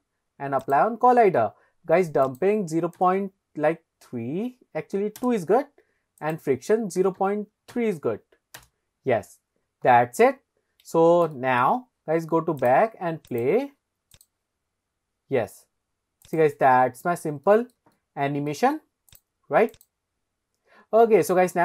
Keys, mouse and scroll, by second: 0.6 click, 2.3-5.2 drag, 6.2 click, 10.6-11.0 scroll down 1, 11.0 scroll up 1, 11.4 shift+middle drag, 12.6 click, 13.3 click, 14.1 click, 14.6-16.2 scroll up 1, 16.2 click, 16.7-17.3 scroll up 1, 17.4 shift+middle drag, 17.9-18.5 middle drag, 19.1 click, 19.7 click.